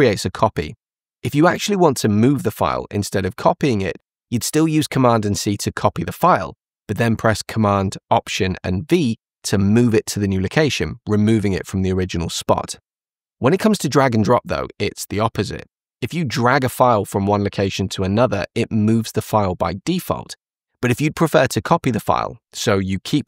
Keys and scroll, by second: 5.0 super+c, 8.4 alt+super+v.